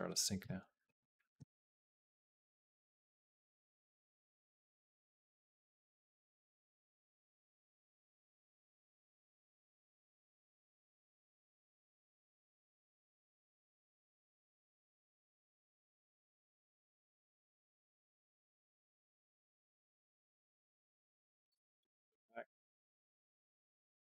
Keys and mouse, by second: 0.7 a, 1.2 a, 4.7 ctrl+z, 6.6 a, 10.4 a, 11.4 click, 11.7 g, 13.6 click, 13.9 g, 16.0-17.6 drag, 18.1 ctrl+z, 18.6 ctrl+z, 19.1 ctrl+z, 19.4 ctrl+z, 19.8 ctrl+z, 20.2 ctrl+z, 20.4 ctrl+z, 20.5 ctrl+z, 20.6 ctrl+z, 20.8 ctrl+z, 21.0 ctrl+z, 21.2 ctrl+z, 21.3 ctrl+z, 21.5 ctrl+z, 21.6 ctrl+z, 21.8 ctrl+z, 22.0 ctrl+z, 22.2 ctrl+z, 22.4 ctrl+z, 22.6 ctrl+z, 22.8 ctrl+z, 23.0 ctrl+z, 23.2 ctrl+z, 23.4 ctrl+z, 23.5 ctrl+z, 23.8 ctrl+z.